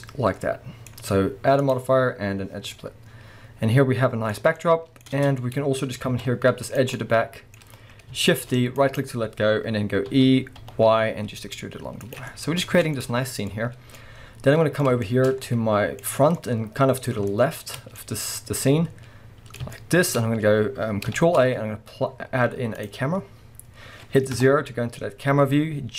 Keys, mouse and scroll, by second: 1.6-2.7 drag, 2.7-6.7 middle drag, 5.1 Tab, 5.8 scroll up 1, 6.1 alt+a, 6.7 click, 6.9-9.0 middle drag, 7.6-8.3 scroll up 1, 8.3 shift+d, 9.0 right click, 10.1 e, 12.1 click, 12.3-25.9 middle drag, 12.7 Tab, 12.9 scroll down 2, 13.5-14.0 scroll up 2, 16.1 scroll up 2, 20.3-21.2 scroll up 1, 21.2 shift+a, 24.4 KP_0.